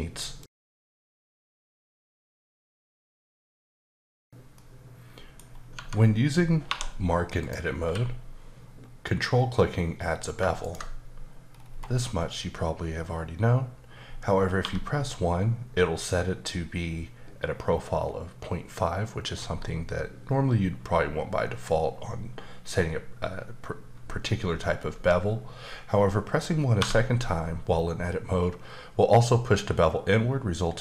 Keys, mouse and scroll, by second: 5.5 scroll up 2, 5.7 Tab, 6.7 2, 7.4 click, 7.8 q, 10.6 ctrl+click, 11.5-12.7 scroll up 3, 14.6 1, 26.8 1.